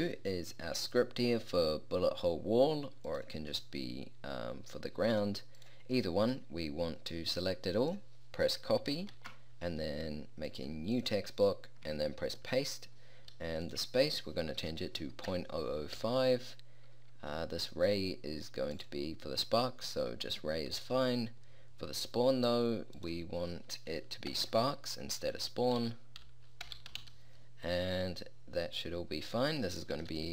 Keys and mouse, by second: 3.1-4.9 middle drag, 6.4-9.2 middle drag, 9.2 ctrl+c, 10.5-12.3 middle drag, 12.3 ctrl+v, 13.7-15.3 drag, 15.3 BackSpace, 16.0 5, 18.9-20.7 drag, 23.0-24.9 drag, 24.4-27.1 typing.